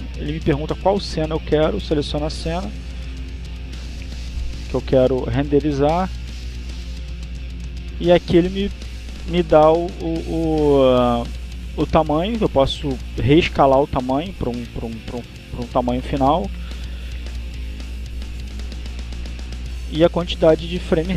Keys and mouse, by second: 3.5 click, 4.3 click, 5.0 click, 5.8 click, 13.0 click, 14.5 click, 15.2 click, 16.7-18.7 typing, 19.3 click, 20.4 click.